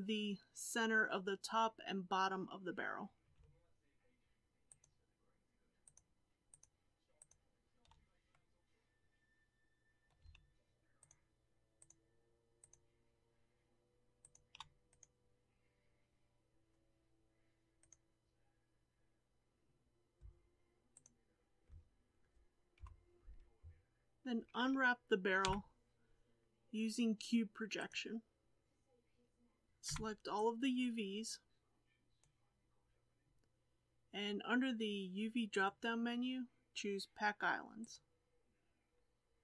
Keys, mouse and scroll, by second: 2.1-4.8 scroll up 4, 4.8 shift+click, 5.9 shift+click, 6.6 shift+click, 7.3 shift+click, 8.3-11.1 middle drag, 11.1 shift+click, 11.9 shift+click, 12.7 shift+click, 14.3 shift+click, 22.8 KP_1, 23.8 a, 27.9 u, 32.2 b, 37.9-39.4 drag.